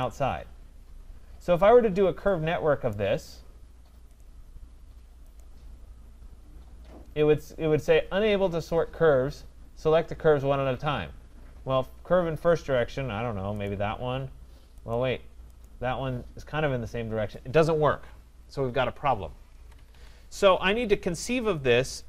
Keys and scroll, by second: 19.5 Escape.